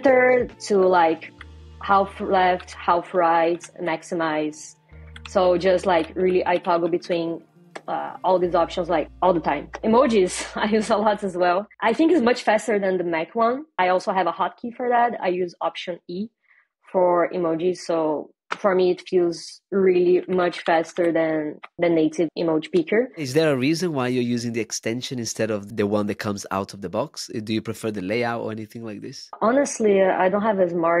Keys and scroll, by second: 0.1 alt+BackSpace, 2.4 alt+Right, 3.4 alt+Up, 12.5 alt+e.